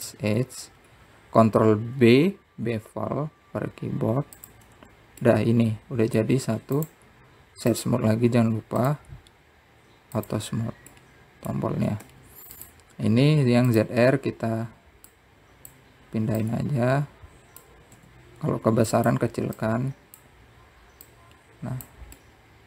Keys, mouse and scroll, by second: 0.7 click, 2.5-3.7 scroll down 2, 3.7 ctrl+b, 6.4 Tab, 7.0-8.5 middle drag, 8.5-10.5 right drag, 10.5 click, 12.0 click, 12.7-13.8 middle drag, 15.5 click, 16.9 click, 18.2 click, 19.7 s, 21.3 click.